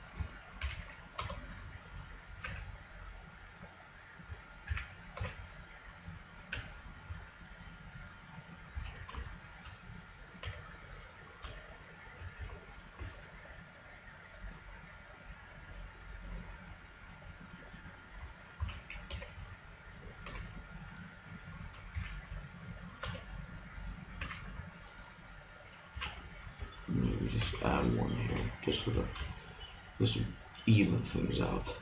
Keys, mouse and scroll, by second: 0.6 a, 1.2 b, 2.4 g, 4.4 click, 4.8 a, 5.2 b, 6.6 g, 8.8 a, 8.9 middle click, 10.5 b, 11.5 b, 13.0 g, 18.4-20.2 drag, 18.6 a, 19.2 b, 20.3 g, 22.0 a, 23.0 b, 24.2 g, 25.6 click, 26.0 a, 27.4 ctrl+r, 29.0 a.